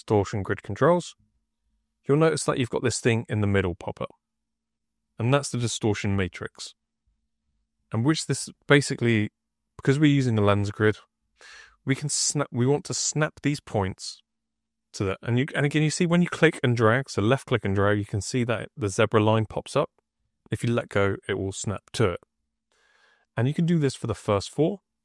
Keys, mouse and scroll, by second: 0.5 click, 4.9 click, 11.6 right click, 12.6-20.1 drag, 23.9-25.0 drag.